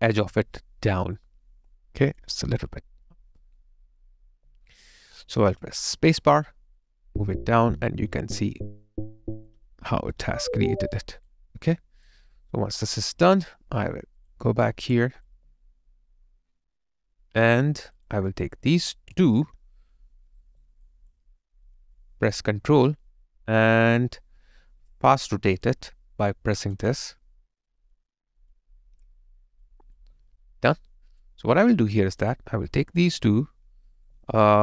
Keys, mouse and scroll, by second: 0.1 alt+right click, 1.0 alt+click, 4.3 alt+right click, 5.1 alt+click, 6.2 space, 10.2 alt+right click, 11.3 alt+click, 12.3 alt+right click, 15.3 alt+click, 20.4 alt+right click, 21.4 alt+middle click, 26.7 ctrl+click, 29.8 ctrl+click, 30.0 alt+click, 33.8 shift+click, 33.9 alt+right click, 34.2 alt+middle click.